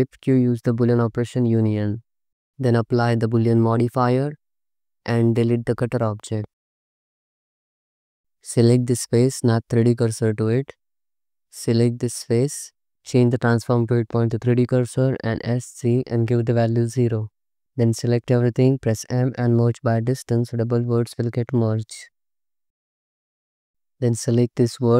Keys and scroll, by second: 0.0 shift+q, 5.6 x, 7.7 Tab, 8.1 3, 9.6 shift+s, 10.7 3, 13.1 ., 15.1 s, 15.6 z, 16.8 0, 18.5 a, 19.3 m, 22.7 1.